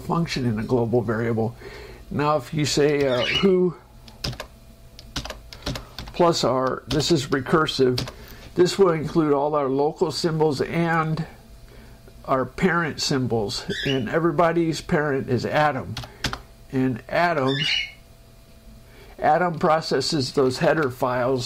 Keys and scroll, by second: 3.0-5.5 typing, 7.3 shift+;, 8.3 shift+0, 16.5 Return, 17.6 Page_Up, 21.0 ctrl+Down.